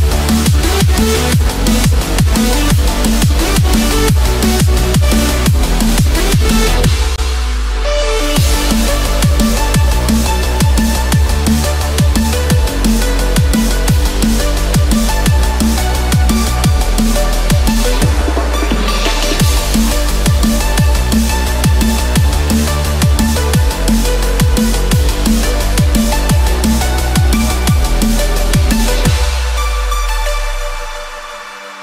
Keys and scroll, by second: 0.1 Escape, 2.5 Return, 3.1 Escape, 5.8 Return, 8.3 Escape, 11.1 Return, 12.2 ctrl+-.